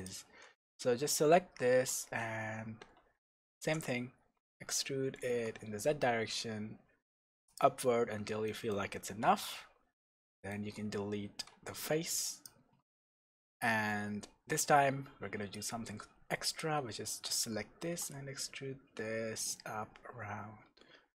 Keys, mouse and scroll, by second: 3.5 e, 7.6 click, 7.9-8.5 scroll down 1, 8.5-15.5 shift+middle drag, 9.0-10.3 scroll up 1, 11.5 x, 15.5 click, 16.4 click, 17.8 g.